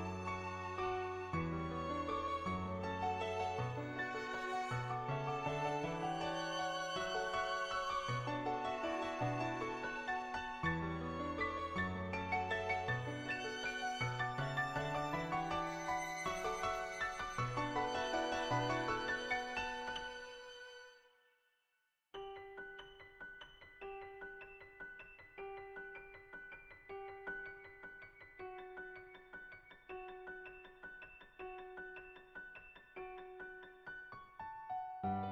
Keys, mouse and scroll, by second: 1.0-5.0 right drag, 6.6 middle click, 7.4 middle click, 8.0 shift+middle click, 11.0 click, 11.6 ctrl+z, 12.5-14.8 drag, 15.6-16.9 middle drag, 17.1 shift+middle click, 17.5 middle click, 18.0 shift+middle click, 18.3 middle click, 20.0-22.5 right drag, 22.5-24.0 drag, 26.1 click, 30.5 click, 31.7 ctrl+z, 32.8 click, 33.4 ctrl+z, 33.4 click, 33.8-35.3 drag.